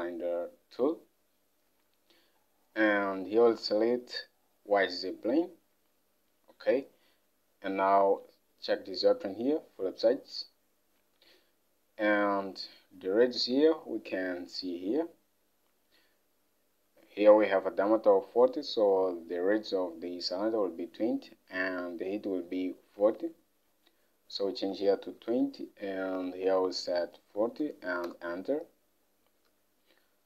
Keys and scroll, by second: 13.5 alt+Tab, 23.1 alt+Tab, 25.2 typing, 27.4 typing, 28.1 Return, 29.5 Home.